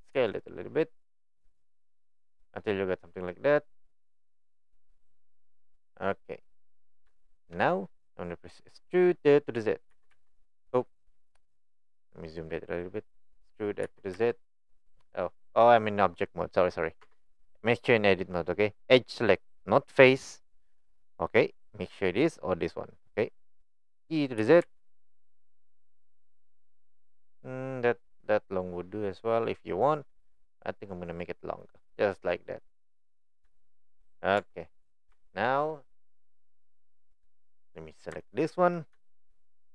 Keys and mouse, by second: 0.2 s, 7.2 shift+middle drag, 10.1 z, 14.1 z, 17.0 Tab, 31.6 click, 32.0 middle click, 33.6 shift+middle click, 34.4 Tab, 35.2 Tab, 39.1 shift+middle click.